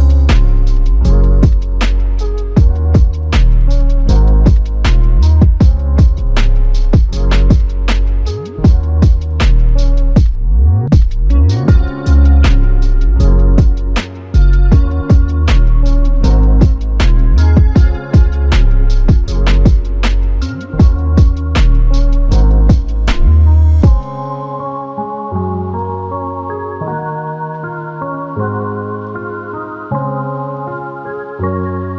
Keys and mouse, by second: 0.3 double click, 3.6 double click, 3.7 shift+click, 4.6 shift+click, 6.8 shift+click, 8.6 alt+click, 12.3 double click, 21.5 shift+click, 23.3 shift+click.